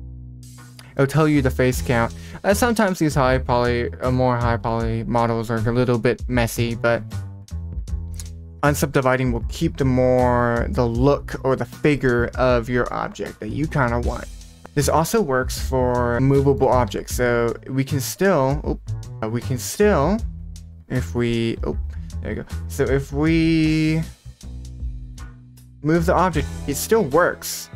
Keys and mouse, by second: 0.7 middle click, 1.8 middle click, 2.7 Tab, 5.0 Tab, 15.6 click, 16.0 click, 16.4 shift+middle click, 16.8 r, 19.2 click, 22.0 click, 23.0-23.5 drag, 24.9 r, 26.2 r.